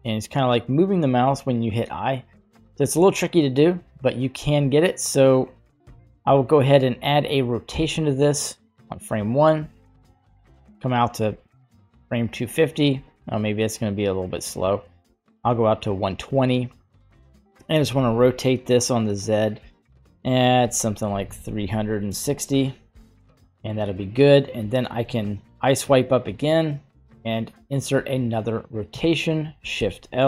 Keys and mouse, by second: 11.3 click, 13.1-15.3 drag, 17.8 r, 25.0 i, 29.8 shift+Left.